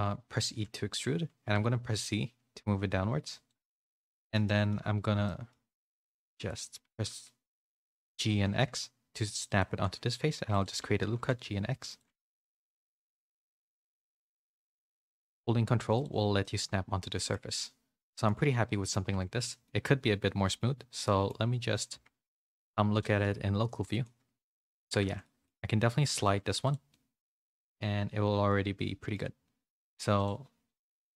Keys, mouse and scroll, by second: 0.5 e, 4.1 shift+middle click, 4.5 middle click, 5.3 middle click, 6.1 z, 6.8 g, 7.6 z, 8.0 g, 10.1 ctrl+r, 11.0 g, 12.4 ctrl+r, 12.9 g, 14.2 ctrl+r, 15.1 g, 16.3 middle click, 17.2-18.2 shift+middle drag, 18.6 middle click, 19.0 2, 19.6 middle click, 21.0 middle click, 21.9 Tab, 23.6 /, 24.0 middle click, 24.7 Tab, 25.2 shift+middle click, 25.6 2, 26.0 g, 26.9-29.1 middle drag, 30.1 click.